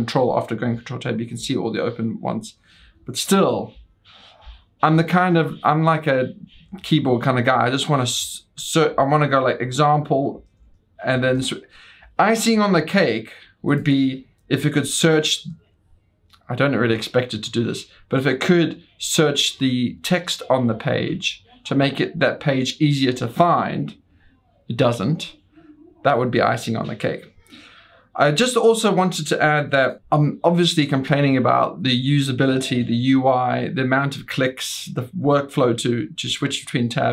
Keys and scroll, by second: 10.3 ctrl+t, 10.8-11.8 typing, 22.8 ctrl+t, 23.3 ctrl+v.